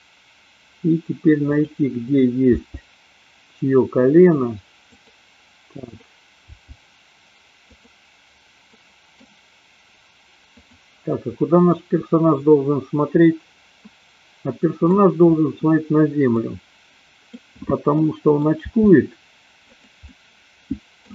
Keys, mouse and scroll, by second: 1.4 click, 2.7 g, 5.9 click, 6.7 g, 7.8 click, 8.8 middle click, 8.8 scroll up 1, 10.5 click, 11.7-14.9 middle drag, 16.3-17.3 middle drag, 18.0-18.4 middle drag, 18.9 r, 20.0-21.0 middle drag.